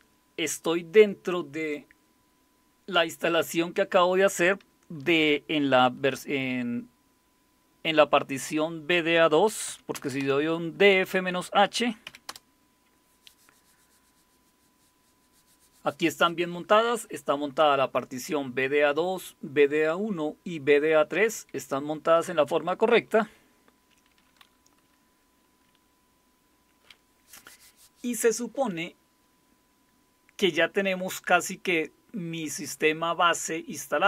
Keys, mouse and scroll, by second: 9.2-10.2 typing, 11.8-12.5 typing.